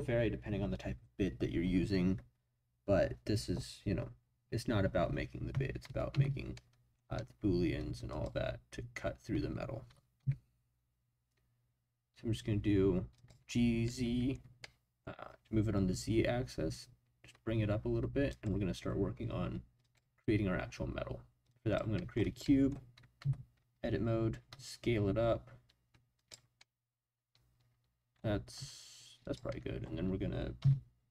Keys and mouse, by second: 6.1 Tab, 6.5-6.9 middle drag, 8.1 click, 9.9 g, 10.2 z, 13.1 click, 13.8-15.0 middle drag, 18.3-19.9 drag, 21.5 click, 21.9 middle drag, 22.4 middle click, 23.2 Tab, 24.5 s, 26.1 click, 26.6-27.6 middle drag, 27.6 click, 27.7 middle click, 28.5 s, 29.2 click, 29.5-30.6 middle drag, 30.6 s.